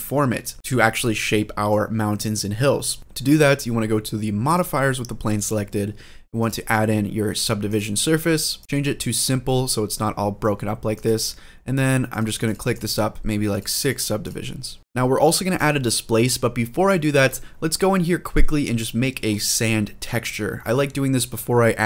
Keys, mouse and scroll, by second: 1.0-1.5 middle drag, 4.3-6.9 drag, 7.4-8.4 drag, 8.6 middle click, 10.7 click, 11.8 click, 12.4 click, 13.3 click, 13.6 click, 14.0 click, 15.3-17.1 drag, 18.4-19.0 scroll up 3, 19.0-21.8 scroll down 2.